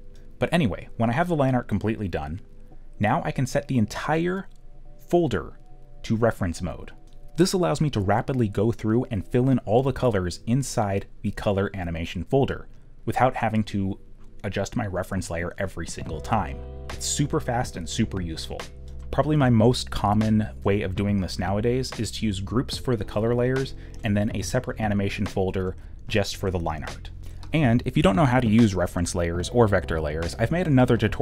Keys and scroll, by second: 10.4 ctrl+z, 10.6 x, 11.9 ., 12.1 ., 14.3 ctrl+z, 14.5 q, 16.4 g, 17.1 ., 19.1 ., 21.3 ., 22.6 ., 23.8 ..